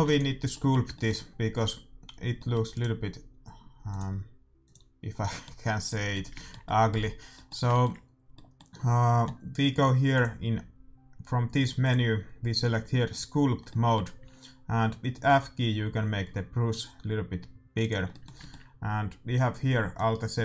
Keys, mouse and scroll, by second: 0.0 ctrl+s, 2.7-4.5 right drag, 3.0-4.2 middle drag, 3.8-6.5 drag, 5.1-8.5 middle drag, 11.3 click, 13.1 click, 13.7-15.3 middle drag, 15.2 f, 18.0-19.9 middle drag, 19.9-20.4 drag.